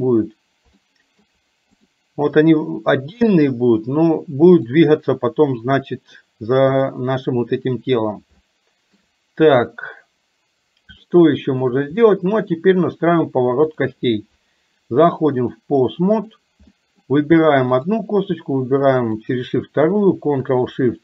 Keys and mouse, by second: 1.0 shift+middle click, 3.2 click, 6.7 click, 8.5 shift+middle click, 11.1 shift+middle click, 12.1 middle click, 15.5-16.5 drag, 16.8 middle click, 19.2 shift+click.